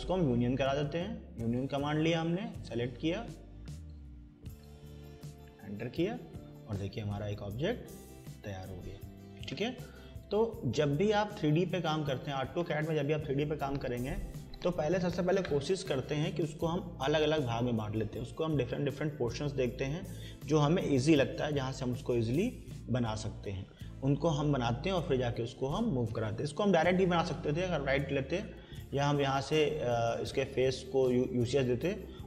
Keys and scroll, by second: 5.3 Return.